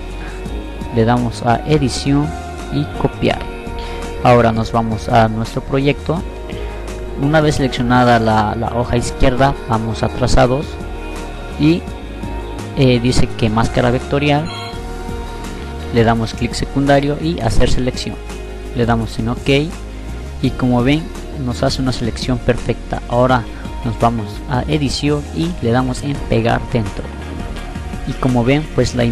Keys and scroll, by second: 14.5 F9, 18.8 F9.